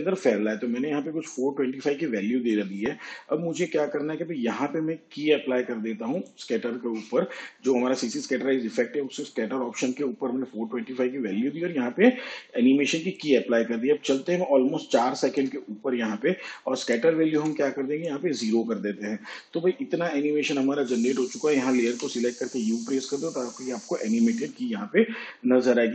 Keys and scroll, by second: 17.3 0, 21.9 u.